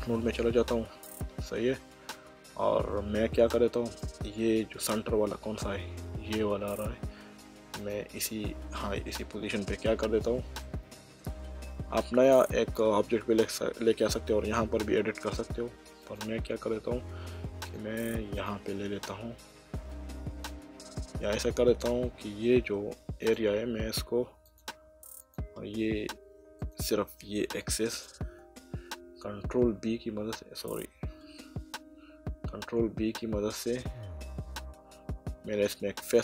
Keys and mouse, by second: 0.8 middle click, 2.9 middle click, 4.0 click, 4.5 middle click, 7.7 click, 10.6 shift+middle click, 16.0 click, 17.6 click, 18.3 shift+click, 19.6 middle click, 22.0 middle click, 23.2 click, 24.5 click, 26.6 click, 27.9 click, 29.3 b, 30.4 Escape, 32.3 ctrl+b.